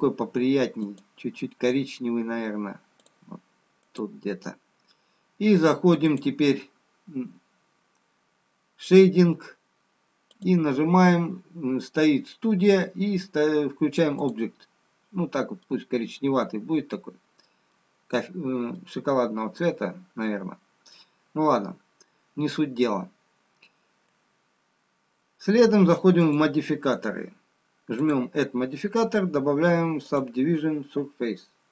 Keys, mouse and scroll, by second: 7.2 click, 11.1 click, 16.4 middle click, 19.3-20.6 scroll up 1, 20.6 middle click, 26.0-29.6 scroll down 1, 29.7 click.